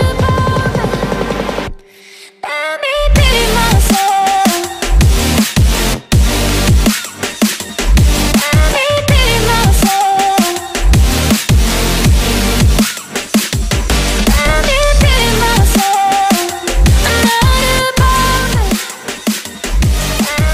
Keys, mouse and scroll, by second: 0.7 double click, 0.9-2.5 typing, 4.6-5.7 typing, 9.7-10.8 typing, 10.3 Tab, 11.5 Tab, 11.9 typing, 15.1 right click, 17.4 right click.